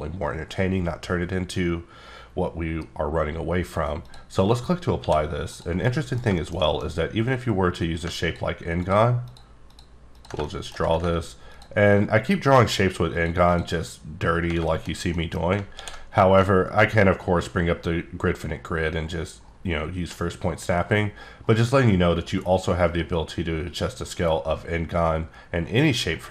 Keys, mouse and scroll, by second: 4.0 click, 5.0 d, 5.5 click, 5.9 middle click, 6.2 scroll down 1, 6.4 shift+middle click, 6.8 scroll up 2, 7.6 click, 9.2 ctrl+click, 9.8 ctrl+click, 10.1 ctrl+click, 10.5 shift+middle click, 11.5 ctrl+click, 13.1 ctrl+click, 13.4 ctrl+click, 14.6 middle click, 15.7 d, 16.6-17.3 scroll down 8, 18.5-19.0 ctrl+scroll down 8, 19.0 ctrl+scroll up 10, 20.1-20.7 ctrl+scroll up 6, 20.8 ctrl+scroll down 3, 21.1 ctrl+scroll up 1, 21.4 ctrl+scroll down 3, 22.3 ctrl+scroll up 3, 22.8 ctrl+scroll down 4, 22.9 ctrl+scroll up 1, 23.8 ctrl+scroll up 1, 24.0 ctrl+scroll down 4, 24.2 ctrl+scroll up 2, 25.3 ctrl+scroll up 11, 25.6 ctrl+scroll down 4.